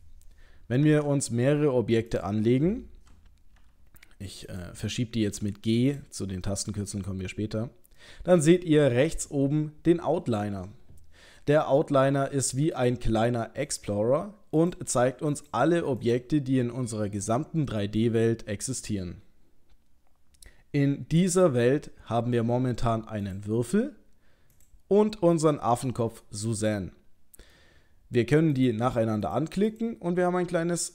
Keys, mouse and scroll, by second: 0.8 shift+a, 3.6 g, 5.9 click, 6.5 middle click, 6.9-8.0 scroll down 1, 8.0 middle click, 12.8 click, 13.7 click, 14.6 click, 15.4 click, 16.0 click, 23.3 click, 24.6 click, 25.9 middle click, 28.6 click, 29.3 click, 29.7 click.